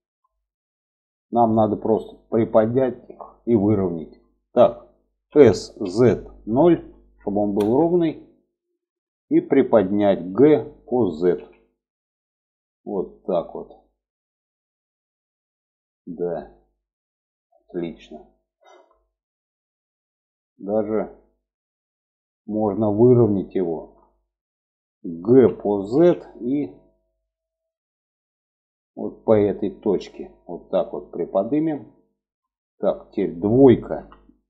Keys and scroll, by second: 4.6 s, 9.6 g, 24.6 g, 33.3 2.